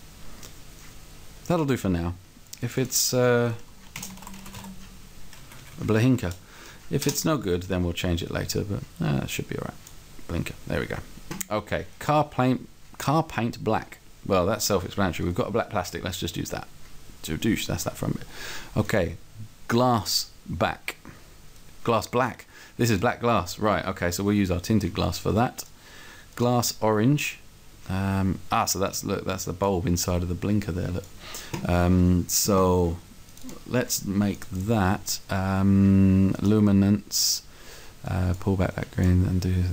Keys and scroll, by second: 4.0-4.8 typing, 5.7 Left, 6.4 BackSpace, 7.1 Return.